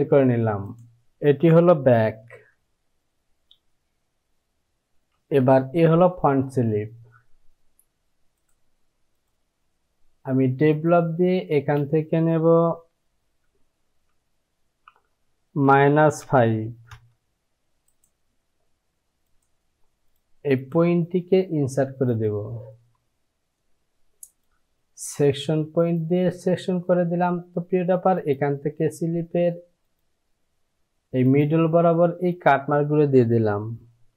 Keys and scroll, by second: 2.4 j, 11.6 space, 15.7 KP_Subtract, 16.3 KP_5, 16.9 Return.